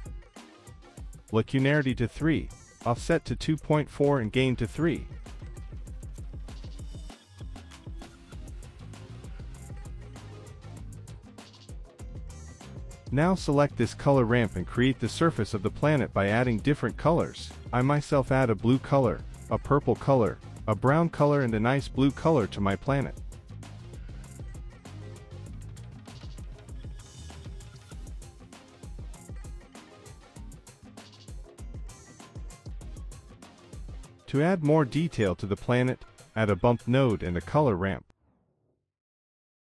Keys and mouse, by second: 2.2 click, 3.8-6.2 drag, 7.2-8.9 drag, 13.9 middle click, 14.4 click, 14.6 middle click, 16.2 middle click, 16.4 middle click, 16.6 drag, 17.0 click, 17.9 click, 18.1 click, 18.3 drag, 18.7 click, 20.0 click, 20.2 click, 21.2 click, 21.3 click, 21.5 click, 22.7 click, 23.6 click, 24.3 click, 24.7 click, 24.7 middle click, 25.0 middle click, 25.3-25.7 drag, 25.8-26.9 drag, 27.0 middle click, 27.8 middle click, 28.5 middle drag, 29.3-29.8 middle drag, 30.5 KP_0, 34.6 click, 36.3 middle click, 37.1 click, 37.3 drag, 37.7 middle click, 38.0 shift+a.